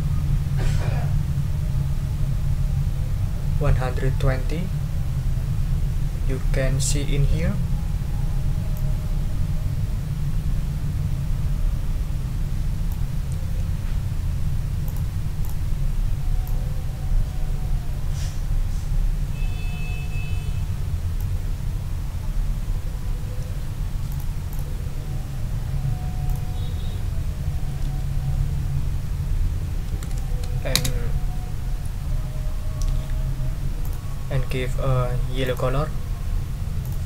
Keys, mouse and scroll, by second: 8.7-13.1 ctrl+drag, 13.4 ctrl+z, 14.8 click, 15.4 click, 16.4-21.4 ctrl+drag, 24.1 click, 24.5 click, 26.3 click, 27.8 g, 29.6-30.5 typing, 30.8 Return, 33.8 click, 35.4 right click, 36.8 click.